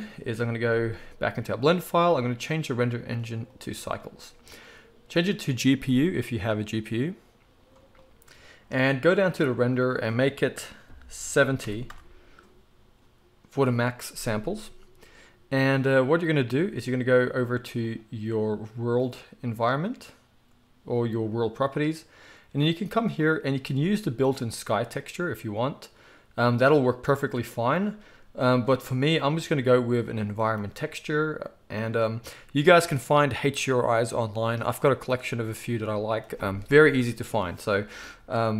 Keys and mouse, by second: 0.0-2.5 middle drag, 2.5-18.1 drag, 18.1-23.2 middle drag, 23.2-38.5 drag.